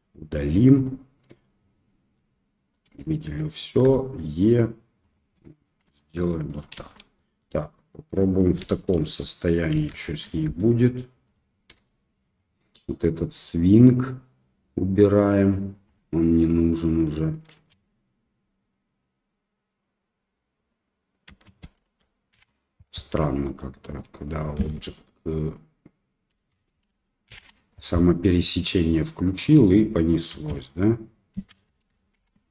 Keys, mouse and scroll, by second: 2.1 middle click, 2.8 a, 3.3 middle click, 3.8 e, 5.7 Tab, 5.9 drag, 6.1-6.5 middle drag, 6.8 shift+z, 7.1 middle click, 8.6 KP_1, 9.0 KP_3, 10.0 shift+middle click, 10.4 r, 11.9 g, 15.9 click, 17.5 space, 21.5 space, 22.3 shift+Left, 23.9 click, 24.5 space, 26.9 space, 27.3 shift+Left, 29.4 click, 30.3 space, 31.4 space, 32.2 shift+Left.